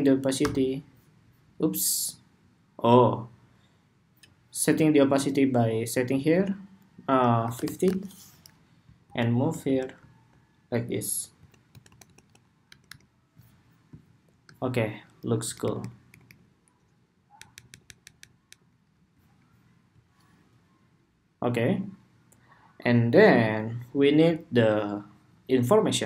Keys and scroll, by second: 15.5 alt+Right, 16.0 alt+Right, 17.1 alt+Down, 17.6 alt+Down, 18.3 alt+Down, 18.9 alt+Down.